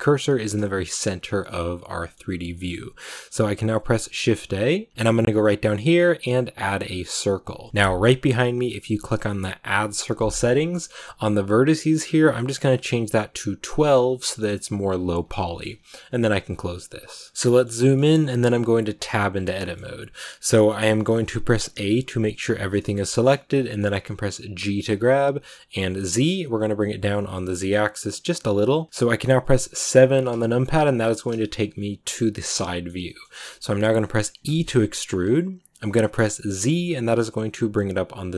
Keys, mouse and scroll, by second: 2.2 scroll up 2, 2.4-4.9 shift+middle drag, 11.7-14.7 drag, 17.4 shift+middle click, 17.5 scroll up 2, 17.7 shift+middle click, 18.1 scroll up 1, 18.9 Tab, 19.4-22.4 shift+middle drag, 22.4 shift+scroll up 1, 22.4-24.5 shift+middle drag, 24.5 g, 30.9 click, 31.3 shift+middle click, 32.3 scroll down 2, 32.5 shift+middle click, 33.1-34.3 scroll up 1, 34.3 e.